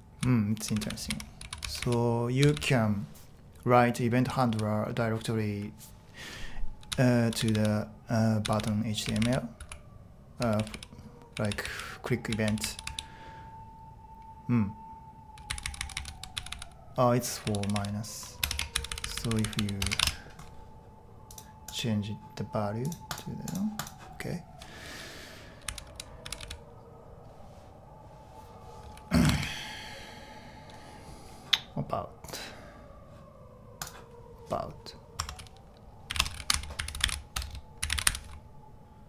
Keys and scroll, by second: 0.0-2.5 typing, 4.3 typing, 6.7-11.6 typing, 15.2-20.0 typing, 20.0 Return, 25.6 j, 25.8 j, 26.2 j, 26.4 j, 29.3 super+Tab, 35.2 Tab, 35.8-39.0 typing.